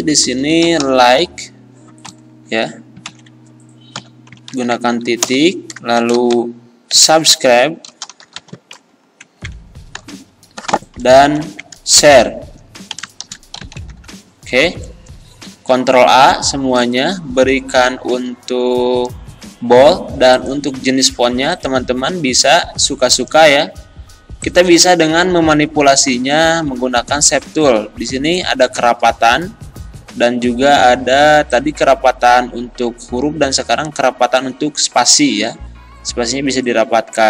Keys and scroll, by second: 0.7 shift+l, 0.9 i, 1.0 k, 1.2 e, 3.1 ctrl+Left, 4.5 ctrl+Right, 5.2 Return, 6.0 shift+s, 6.2 u, 6.3 b, 7.9 r, 8.1 i, 8.3 b, 9.2 ctrl+Left, 11.3 ctrl+Right, 12.0 Return, 13.2 shift+s, 13.6 h, 13.8 r, 13.9 e, 15.5 ctrl+a.